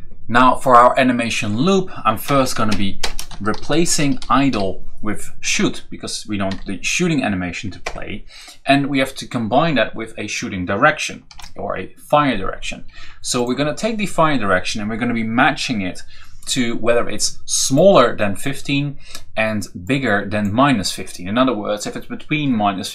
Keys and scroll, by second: 2.2-4.8 typing, 6.3 Right, 7.6 Return, 11.1 ctrl+v.